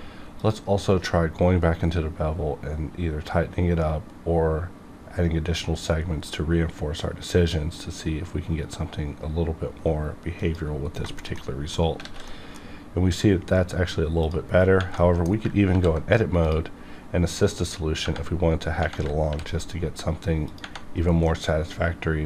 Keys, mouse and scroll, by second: 0.4 click, 4.8 scroll up 1, 10.4 click, 10.8 scroll down 1, 11.0 shift+middle click, 11.5 middle click, 12.0 alt+a, 12.3 middle click, 12.6 scroll up 1, 14.2 click, 14.5 scroll down 1, 15.1 middle click, 15.7 ctrl+r, 16.4 click, 19.3 ctrl+r, 19.5 ctrl+click, 20.5 click, 21.2 middle click, 21.4-22.2 middle drag.